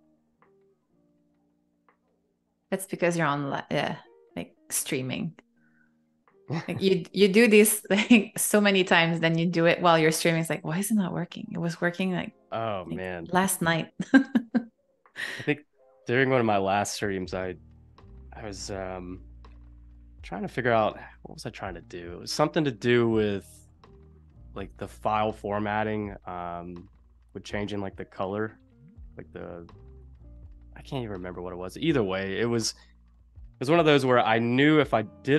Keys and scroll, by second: 0.1 space, 1.7 super+y, 2.3 p, 9.4 super+y, 9.8 a, 11.3 super+c, 11.8 BackSpace, 13.8 super+f, 15.3 shift+super+[, 16.2 space, 17.7 super+y, 19.1 p, 33.3 super+y, 34.0 shift+super+[, 34.9 a.